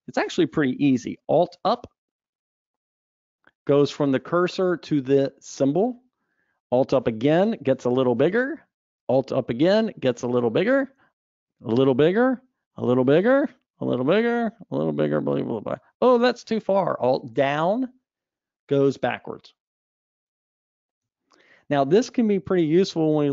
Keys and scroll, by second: 2.2 alt+Up, 7.5 alt+Up, 16.3 ctrl+alt+Down, 21.7 Escape, 22.8 super+Up.